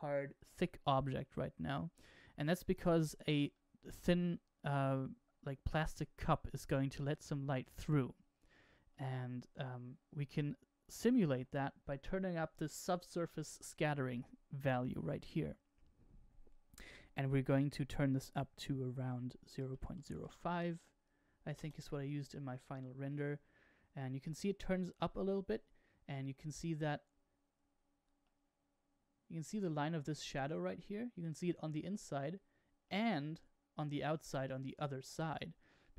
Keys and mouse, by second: 4.8-7.8 shift+middle drag, 8.4-9.9 shift+middle drag, 14.2-22.6 drag, 24.2-25.2 middle drag, 26.9-28.3 middle drag, 32.4-33.1 middle drag.